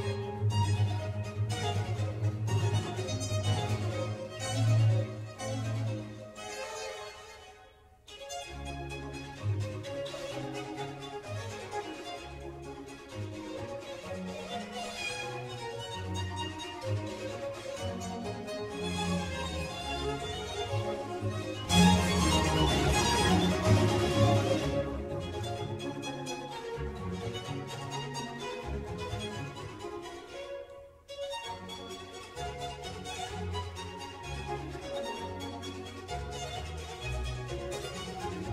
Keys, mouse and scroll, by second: 5.4 click, 6.7 click, 7.1-7.5 scroll up 1, 7.5-9.2 middle drag, 9.2 scroll up 1, 9.4 scroll down 2, 10.1 s, 11.2 click, 11.5 click, 12.3 s, 17.1 g, 18.8-19.2 scroll down 1, 19.2 click, 20.0 click, 20.7 shift+click, 21.0 g, 22.0 click, 22.4-22.9 middle drag, 22.9-23.3 scroll up 2, 23.3 scroll down 1, 23.6-24.7 shift+middle drag, 24.7-25.2 scroll up 1, 25.2 click, 27.4-29.6 middle drag, 29.6 g, 34.3-34.7 scroll down 1, 34.7-35.3 middle drag, 35.3 click, 35.6-36.0 scroll up 1, 36.0-36.3 scroll down 1, 36.5 click, 36.8-38.5 middle drag.